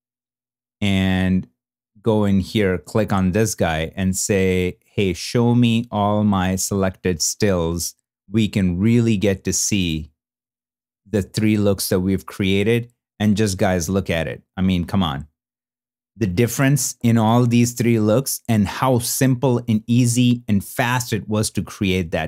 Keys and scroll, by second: 10.6 shift+f.